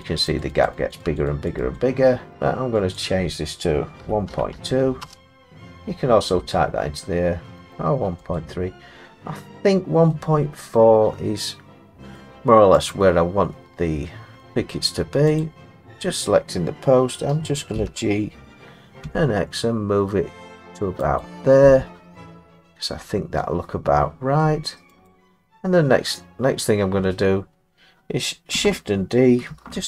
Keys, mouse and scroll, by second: 0.2 click, 0.4 click, 0.6 click, 0.9 click, 1.5 click, 1.8 click, 2.4 click, 3.0 click, 4.0-5.0 typing, 7.7 click, 8.4 click, 12.1 middle click, 12.2 middle click, 12.9 click, 14.5 middle click, 15.4 click, 17.7 g, 19.0 x, 21.2 click, 24.4 middle click, 25.1 click, 29.5 shift+d.